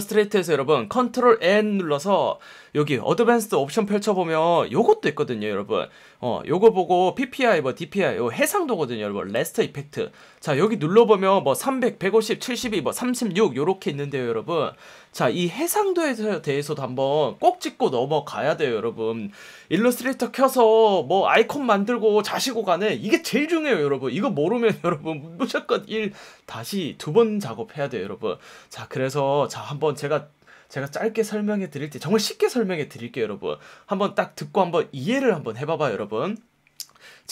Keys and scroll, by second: 4.1 F1, 10.1 F1.